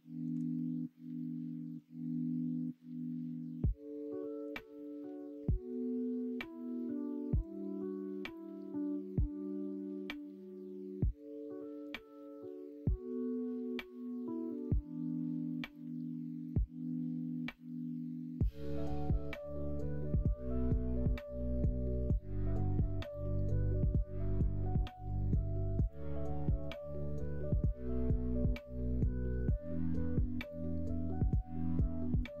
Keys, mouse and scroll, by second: 0.5-6.3 middle drag, 7.4 click, 8.7-14.5 middle drag, 19.6 x, 21.0 click, 21.9 click, 23.2-24.5 middle drag, 25.0 click, 26.5-27.9 middle drag, 28.7 click, 29.2 2, 29.6 click, 30.4 g.